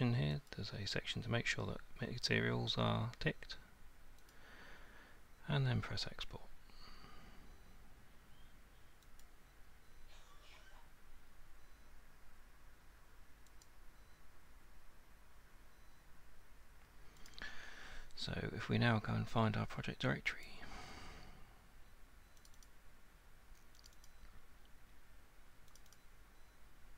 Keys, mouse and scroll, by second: 0.5 click, 1.6-14.3 drag, 15.5 click, 17.3 click, 17.5 click, 20.5 click, 22.5 click, 22.7 click, 23.9 click, 24.1 click, 25.8 click, 26.0 click.